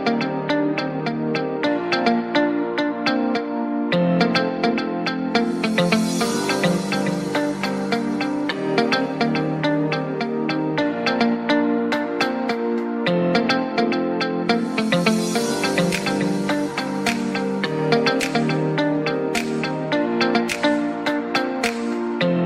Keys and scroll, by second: 3.2 Escape, 10.2 Escape.